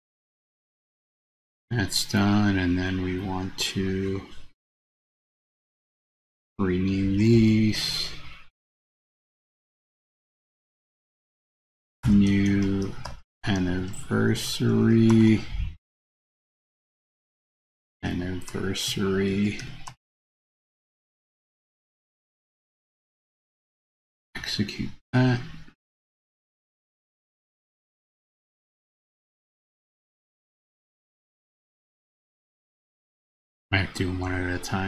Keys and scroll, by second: 5.3 super+c, 7.7 super+v.